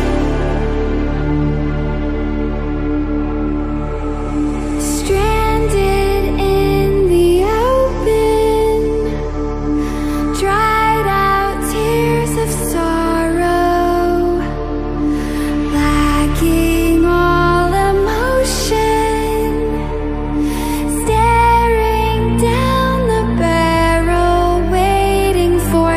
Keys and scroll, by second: 0.5 Escape, 7.9 Return, 10.4 alt+7, 11.4 Escape.